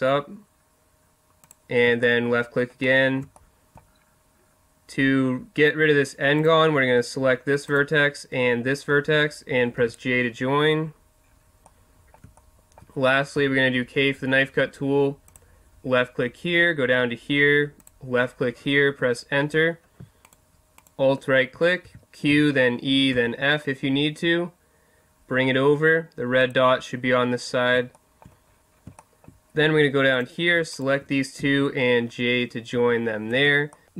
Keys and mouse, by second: 1.5-2.0 drag, 2.0-3.3 middle drag, 3.4-6.4 middle drag, 6.4-9.5 right drag, 9.8 j, 11.7 middle click, 11.9 click, 12.1 middle click, 13.0 typing, 13.2 right click, 20.2-23.1 right drag, 21.8 q, 26.5-28.0 drag, 28.2 click, 28.4-30.1 middle drag, 31.4 j, 32.0 click, 32.8 a, 33.4 Tab.